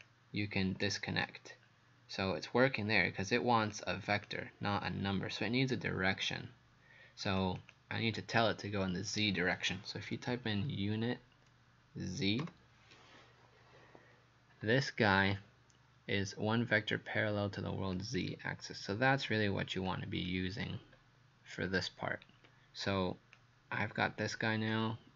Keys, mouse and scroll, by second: 3.7 click, 7.6 click, 10.1-12.4 typing, 18.0 click, 20.6-21.0 scroll up 2, 21.9 scroll up 1, 22.1-22.7 scroll down 1, 23.4 click.